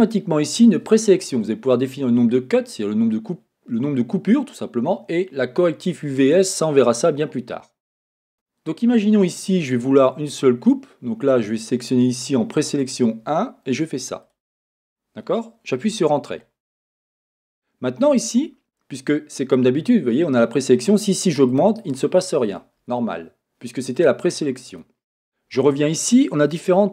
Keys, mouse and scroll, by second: 8.3 Escape, 14.2-20.4 drag, 16.0 Return, 16.4-20.4 scroll up 1, 21.5-23.0 drag, 26.5 click, 26.7 click.